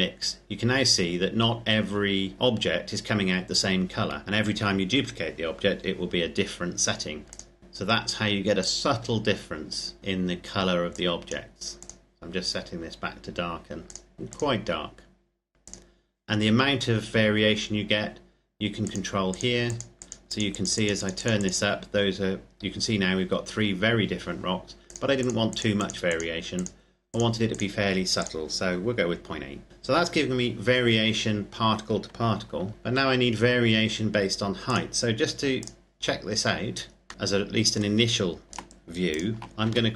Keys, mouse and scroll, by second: 7.2 click, 8.3 click, 9.8 scroll up 1, 10.0 click, 18.5 click, 24.6 click, 29.7-31.4 scroll down 1, 32.4 ctrl+Num_Lock, 32.4-33.1 scroll down 2, 32.5 ctrl+s, 34.3 click, 35.8-37.1 scroll down 1, 37.1 middle click, 38.5 shift+right click, 39.5 shift+d.